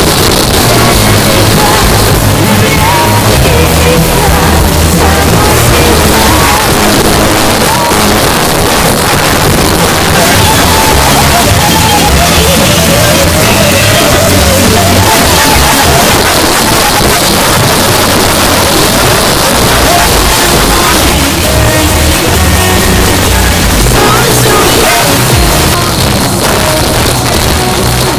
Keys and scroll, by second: 6.5 Page_Down, 16.1 Page_Down, 25.7 Page_Down.